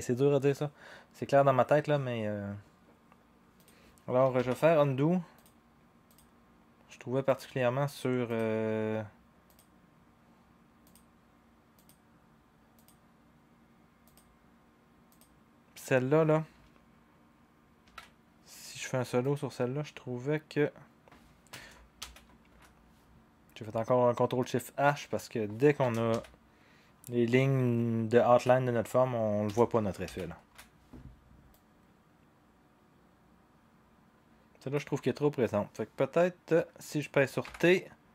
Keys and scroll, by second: 4.4 ctrl+z, 17.8 ctrl+v, 22.0 ctrl+shift+h, 26.1 ctrl+shift+h, 30.1 ctrl+shift+h, 37.4 t.